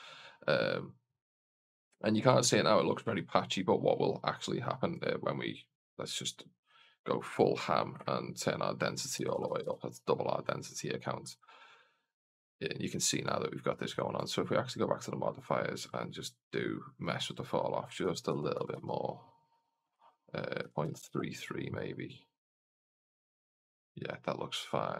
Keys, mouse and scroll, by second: 3.7-4.2 scroll down 2, 4.1-5.0 scroll up 2, 5.0 click, 6.0-11.5 drag, 9.3 KP_0, 14.4 click, 15.2 scroll down 1, 16.0-16.9 scroll down 3, 16.9-24.1 drag, 20.8 KP_3.